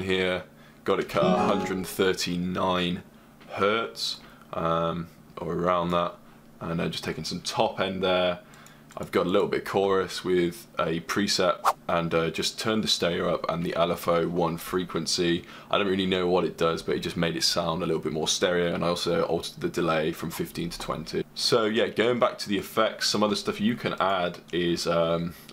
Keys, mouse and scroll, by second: 7.1-9.9 drag, 11.4 click, 14.3 click, 18.2 click, 18.4 click, 19.1 click.